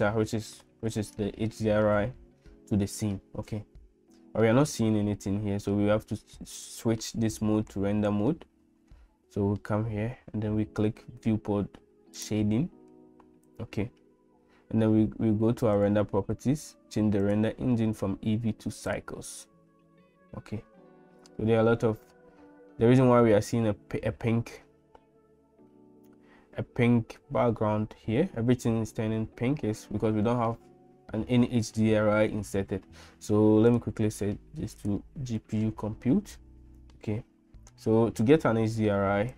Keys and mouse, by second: 17.2-19.5 drag, 33.8-35.8 drag.